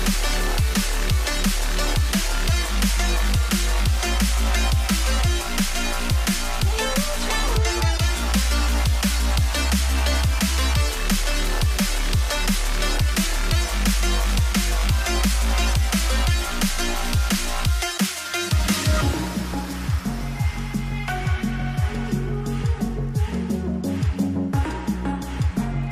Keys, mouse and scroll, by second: 0.4 alt+click, 3.3 alt+scroll up 2, 3.9 ctrl+click, 4.8 ctrl+click, 6.4 Return, 7.7-8.6 alt+scroll up 1, 9.1 alt+scroll down 5, 11.0 space, 11.3 scroll down 2, 11.5 alt+space, 13.7 right click, 14.0 alt+click, 14.7 shift+click, 16.3 double click, 19.1 space, 22.2 alt+scroll down 4, 24.0 shift+click, 24.7 ctrl+click, 25.4 ctrl+g.